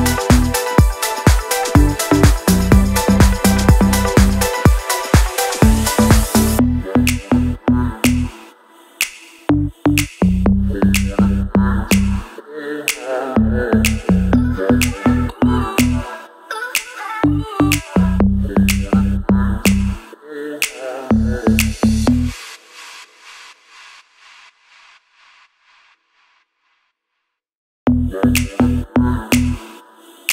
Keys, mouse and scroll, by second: 8.9-12.5 alt+drag, 12.5-19.3 alt+drag, 23.5 ctrl+c, 24.1 ctrl+v, 25.3-26.9 drag, 26.9 Down, 29.3 Down.